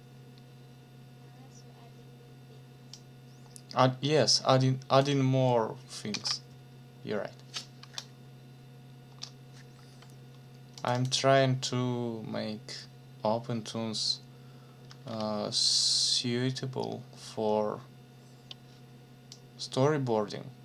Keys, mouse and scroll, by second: 2.9-5.2 drag, 6.1 ctrl+v, 9.1 BackSpace, 10.8 click, 14.9 ctrl+s, 19.3-20.6 drag.